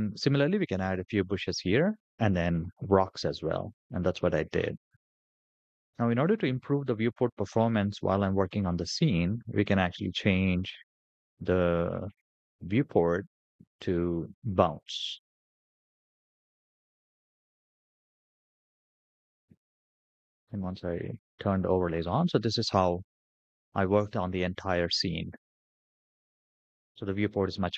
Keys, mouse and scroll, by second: 4.3-5.0 middle drag, 5.7-8.7 middle drag, 10.3-11.8 scroll down 10, 12.4-16.0 drag, 18.3 click, 19.3-19.7 middle drag, 20.8 click, 21.8-23.2 middle drag, 23.8-24.1 scroll up 3, 24.3 shift+middle click, 24.8-25.3 scroll down 2, 25.3-26.0 middle drag, 26.3 shift+middle click, 26.7-27.7 middle drag.